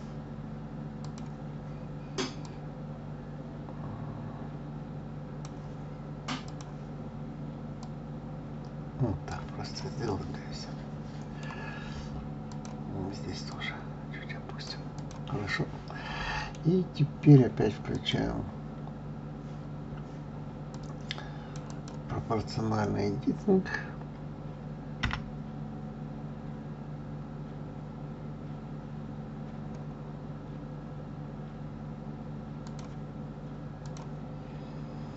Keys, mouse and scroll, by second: 2.4 click, 6.4 click, 7.8 click, 9.6 click, 10.1-12.4 middle drag, 12.4 click, 13.5 click, 14.9 click, 15.4-17.9 middle drag, 17.9 click, 20.7 click, 21.6 click, 33.8 click.